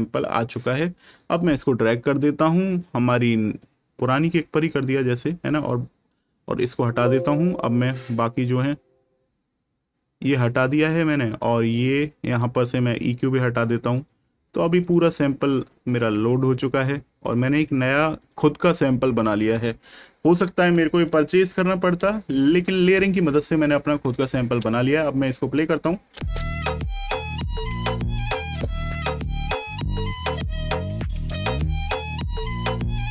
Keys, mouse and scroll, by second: 5.6 right click, 11.2 click, 14.7 click, 18.1 click, 21.0 right click, 22.0 ctrl+scroll up 1, 24.1 scroll up 1, 26.0 space, 27.4-30.0 ctrl+scroll down 1, 32.3 click.